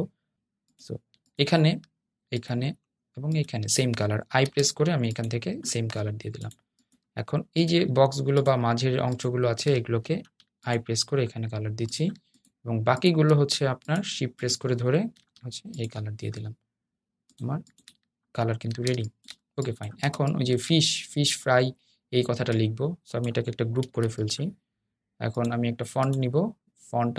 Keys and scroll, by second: 4.4 i, 10.7 i, 15.9 i.